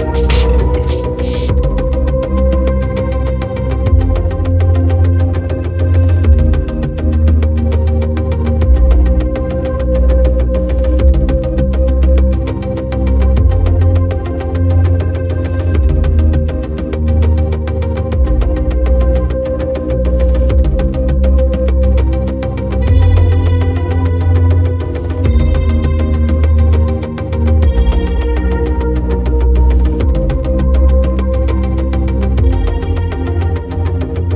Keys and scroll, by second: 31.6 ctrl+alt+z.